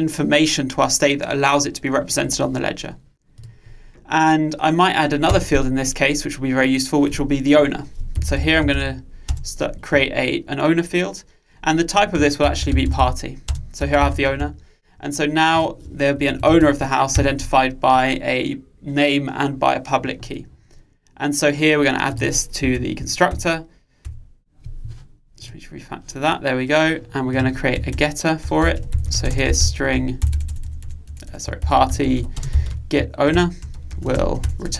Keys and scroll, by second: 16.7 alt+Return, 22.7 alt+Return, 33.4 Return.